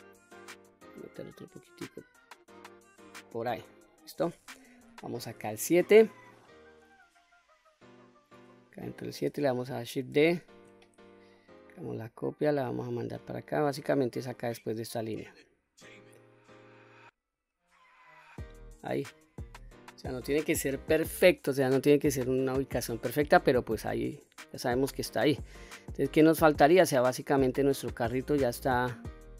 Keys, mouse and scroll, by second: 0.7-3.4 drag, 3.7 middle click, 4.8 KP_7, 10.2 shift+d, 11.4 right click, 12.5-18.4 drag, 19.2-19.6 scroll down 1, 19.6-20.2 middle drag, 20.6 middle click, 21.9-22.2 middle drag, 22.6 click, 23.1-23.6 scroll down 2, 23.6 middle click, 24.8-25.3 scroll up 2, 25.3-26.3 middle drag, 26.9-29.3 middle drag.